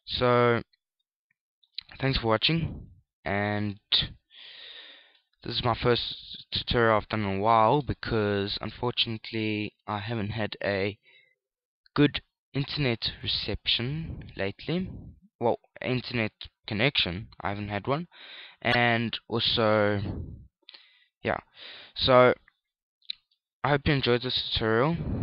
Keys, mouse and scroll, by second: 0.3 shift+middle click, 0.3-1.4 scroll down 1, 2.5 middle click, 3.6 KP_1, 4.4 KP_3, 24.6 KP_Add, 24.9 KP_Add, 25.0 KP_Add.